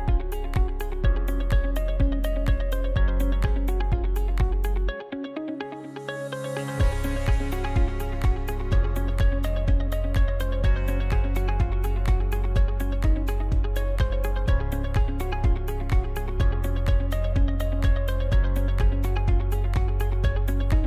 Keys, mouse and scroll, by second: 0.0-1.7 middle drag, 1.7 click, 2.3 scroll up 1, 3.1 right click, 3.5 right click, 4.0 scroll down 1, 4.8 shift+right click, 5.8 f, 6.8-7.7 scroll up 1, 7.7 right click, 8.1 right click, 8.6 scroll down 2, 9.6 shift+middle click, 10.1-10.9 scroll up 3, 10.9 scroll down 1, 11.9 shift+right click, 12.8 f, 13.4-14.9 shift+middle drag, 14.9 right click, 15.3-16.6 shift+middle drag, 16.6 shift+right click, 17.6 f, 18.2-20.3 shift+middle drag, 20.3 ctrl+r.